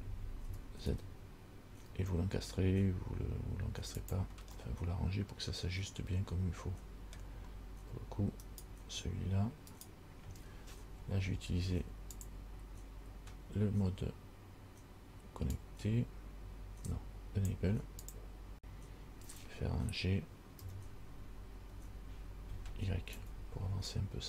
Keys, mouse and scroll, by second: 0.7 g, 4.8 middle click, 8.7 right click, 10.0 right click, 12.4 click, 20.8 g.